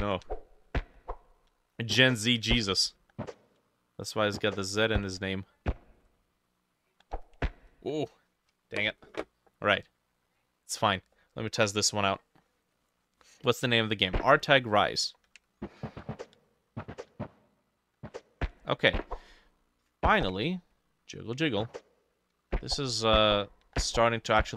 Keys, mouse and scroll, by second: 11.2 middle click, 11.6 F6, 12.9 click.